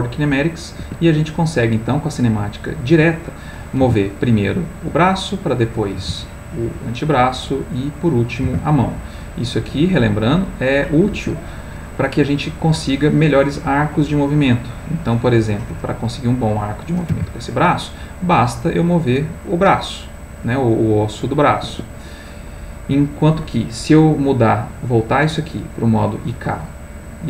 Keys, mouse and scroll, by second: 0.8 Escape, 2.0 middle click, 3.8 r, 4.8 click, 5.5 click, 6.0 r, 7.2 click, 8.0 click, 8.4 r, 11.1 Escape, 12.2 middle click, 14.8 middle click, 16.0 click, 17.1 r, 21.6 Escape, 24.4-26.1 drag, 26.8 click.